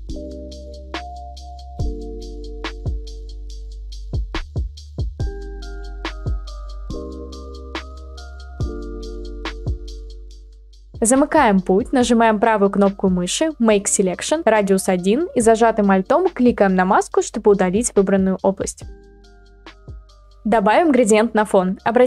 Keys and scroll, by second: 4.8 ctrl+z, 20.2 Delete.